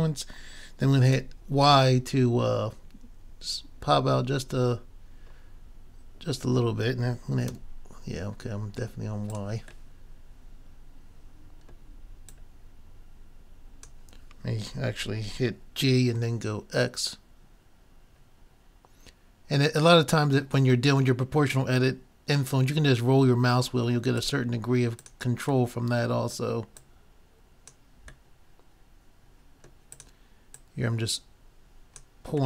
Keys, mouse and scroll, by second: 9.4-11.3 drag, 12.5-14.0 drag, 15.0 g, 24.3-26.1 drag, 25.7-26.8 middle drag, 26.6 click, 26.8-28.4 drag, 28.4-29.4 middle drag, 30.0 click, 30.4 middle click, 30.4 right click, 31.3 click.